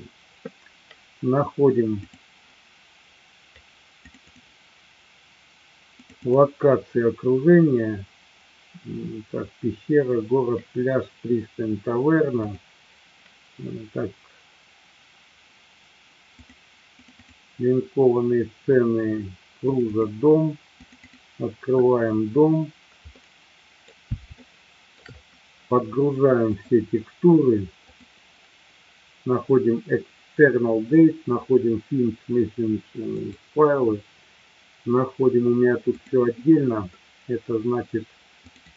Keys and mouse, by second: 23.0-23.9 middle drag, 24.4-25.0 shift+middle drag, 26.5-33.5 drag.